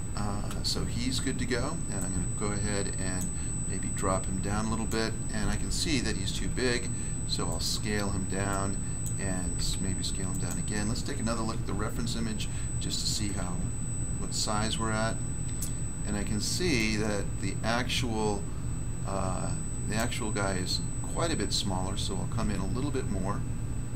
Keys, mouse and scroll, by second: 0.4 Return, 1.9 click, 3.1 click, 3.9 click, 6.3 s, 8.4 click, 9.0 click, 9.5 s, 11.4 1, 13.4 1, 14.8 scroll up 1, 16.7 click, 19.9 click, 22.3 s.